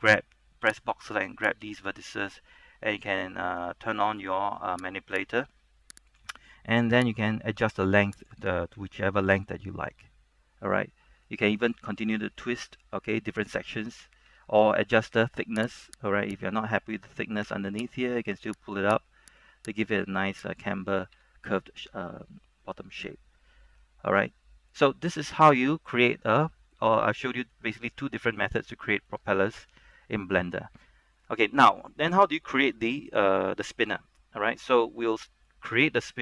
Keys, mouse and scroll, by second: 0.8 b, 1.1-8.6 drag, 8.9 Tab, 9.3 scroll down 1, 9.6-11.6 middle drag, 11.9 scroll up 1, 12.1 middle click, 13.1 middle click, 14.4 Tab, 14.7 scroll up 1, 15.1 shift+middle click, 15.8 right click, 16.8 middle click, 18.7 click, 19.4 right click, 20.1 click, 21.2 Tab, 21.5-23.3 middle drag, 23.3 scroll down 1, 23.6 middle click, 24.6 middle click, 25.1 middle click, 26.8 shift+middle click, 28.1 shift+middle click, 29.4 shift+middle click, 30.7 scroll up 1, 31.0 shift+middle click, 32.1 scroll down 1, 34.7-35.2 scroll up 1, 35.2 middle click, 35.8-36.1 scroll up 1, 36.1-36.2 middle drag.